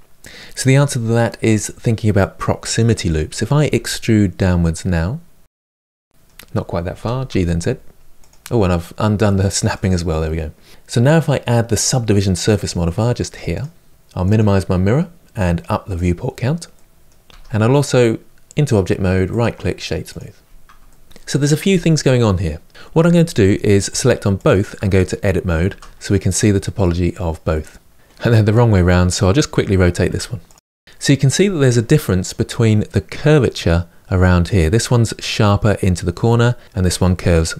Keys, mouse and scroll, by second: 3.4 e, 5.6-6.7 middle drag, 6.7 g, 9.5 click, 9.9-11.4 middle drag, 13.3-13.9 drag, 13.9-15.7 middle drag, 15.7-16.5 drag, 16.5-17.0 middle drag, 17.0 Tab, 19.9-20.6 right drag, 20.6-23.7 shift+middle drag, 23.7 click, 25.4 Tab, 26.5-27.9 middle drag, 27.9 a, 29.8 Tab, 29.9 r, 30.3 Tab, 30.5 Tab, 30.7 Tab, 30.8-37.5 shift+middle drag.